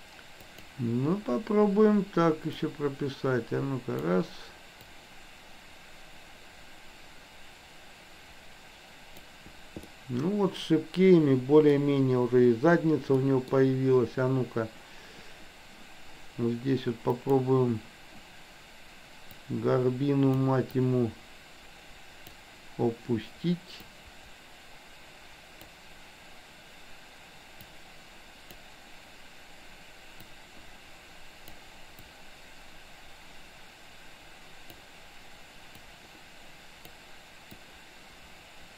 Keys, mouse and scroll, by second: 0.5 click, 2.7-4.2 drag, 5.0-9.5 drag, 10.0-11.7 middle drag, 13.2 middle click, 17.2 click, 19.5-20.5 drag, 20.7-22.3 drag, 23.8-25.7 drag, 27.6-28.6 drag, 30.3-31.5 drag, 32.1-34.7 drag, 35.8-37.0 drag, 37.6-38.7 drag.